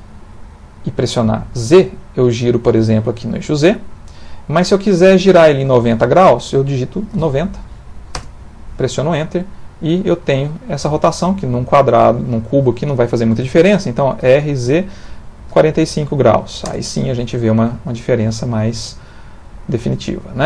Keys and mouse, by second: 9.0 middle click, 9.8 middle click, 10.7 middle click, 14.2 r, 17.0 middle click.